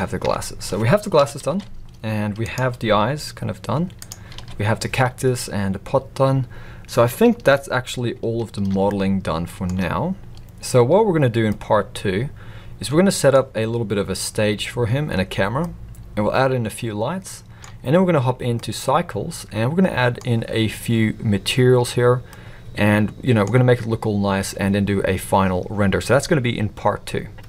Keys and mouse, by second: 0.2 Tab, 1.2 KP_1, 1.5 alt+a, 2.5-2.8 drag, 2.9 g, 4.3 alt+a, 8.9-9.7 shift+middle drag, 11.5-13.3 middle drag, 15.6-17.6 middle drag, 18.6-20.1 middle drag, 22.3-23.4 middle drag.